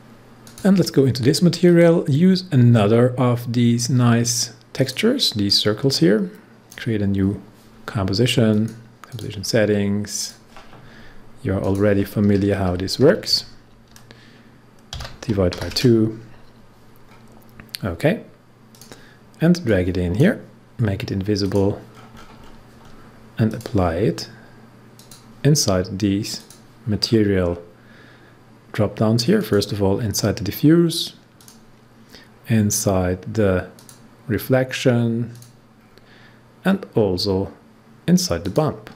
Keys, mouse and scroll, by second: 4.7-8.5 drag, 12.6 Right, 14.9 shift+/, 15.5 2, 17.0 scroll down 1, 18.7-21.4 drag, 21.9-22.5 scroll up 1, 23.4 click, 27.0 scroll down 1, 27.5 scroll down 1, 29.3 click, 33.7 click, 35.3 click, 35.7 scroll down 1, 38.4 click.